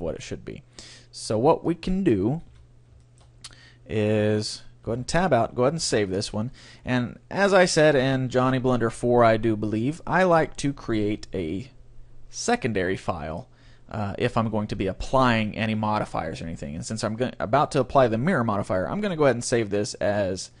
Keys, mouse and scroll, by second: 1.7-3.5 drag, 2.5 a, 3.1-4.9 middle drag, 5.0 Tab, 5.9 ctrl+s, 9.3-11.0 drag, 19.5-20.6 drag.